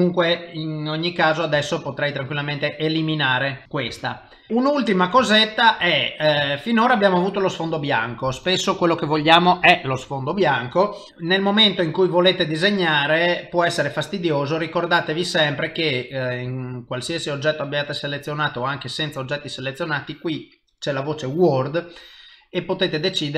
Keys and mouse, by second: 0.2 middle click, 1.5 x, 3.1 middle click, 3.9 KP_0, 5.3 ctrl+middle click, 5.9 middle click, 6.5 shift+middle click, 7.0 middle click, 11.1 shift+middle click, 11.7 middle click, 15.3 click, 15.7 click, 16.1 click, 16.5 click, 17.1 click, 17.5 click, 18.1 click, 19.6 click.